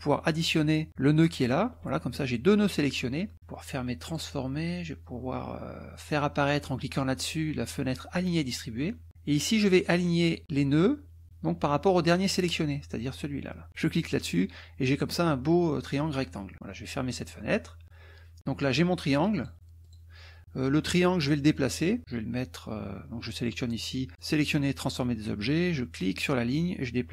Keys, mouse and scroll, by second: 1.4 shift+click, 4.0 click, 8.3 click, 13.7 click, 17.2 click, 19.4 click, 19.8 click, 24.2 click, 25.8-27.1 drag.